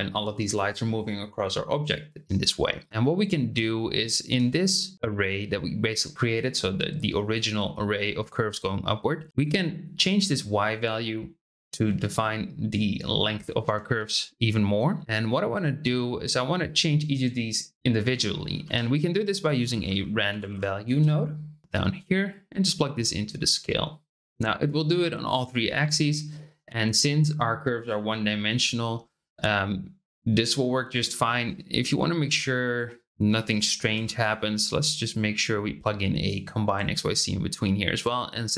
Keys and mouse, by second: 3.9 shift+middle click, 9.3-11.8 drag, 13.9 ctrl+z, 18.3 shift+click, 18.6 shift+a, 22.3-23.5 drag, 28.4-31.0 middle drag, 32.6 click, 33.9 shift+d, 34.9 click, 36.4-38.0 drag.